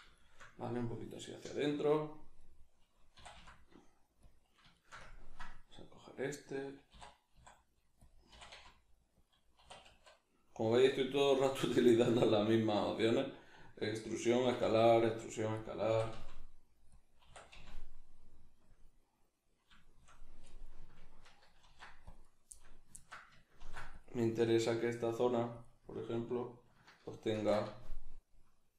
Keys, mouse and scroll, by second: 0.0 click, 0.2-3.1 shift+middle drag, 3.1 e, 4.3 click, 4.7 shift+middle click, 6.9 e, 8.1 click, 8.3 e, 9.3 click, 9.6 e, 10.9 click, 11.6-14.4 middle drag, 14.4 e, 15.7 click, 15.9 e, 17.0 click, 17.3 e, 18.8 click, 18.9-22.3 middle drag, 21.6 ctrl+r, 22.3 right click, 22.5-25.6 middle drag, 23.6 ctrl+r, 25.6 click, 27.3 ctrl+b.